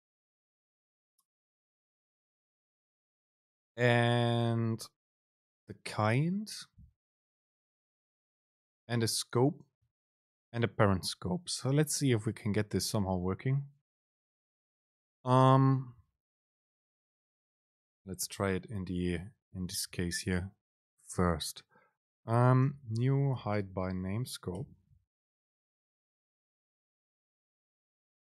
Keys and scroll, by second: 16.9 Delete, 17.1 Up, 19.4 End, 20.1 Return, 24.0 super+space.